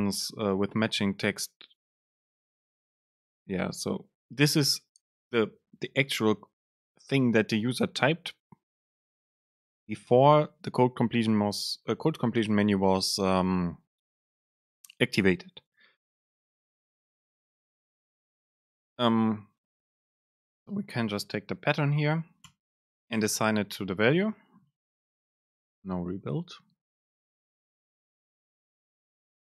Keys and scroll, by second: 20.6 super+space, 23.1 Down.